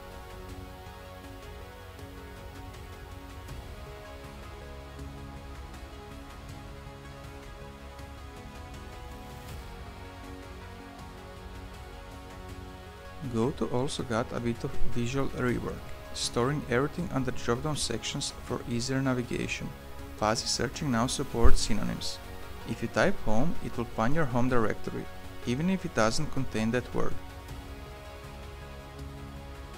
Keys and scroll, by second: 14.7 ctrl+p, 21.3-22.4 typing, 23.2 ctrl+BackSpace, 24.2-25.4 typing, 27.2 ctrl+BackSpace, 29.6 Escape.